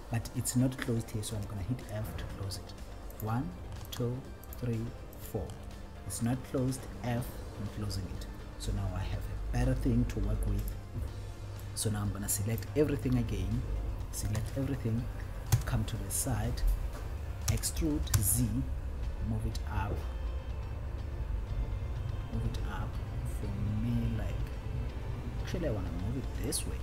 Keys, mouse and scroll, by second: 1.6 f, 3.2 click, 4.8 shift+click, 5.7 click, 7.0 f, 10.7 click, 12.0 click, 14.6 a, 15.9 KP_1, 17.7 e, 18.6 z.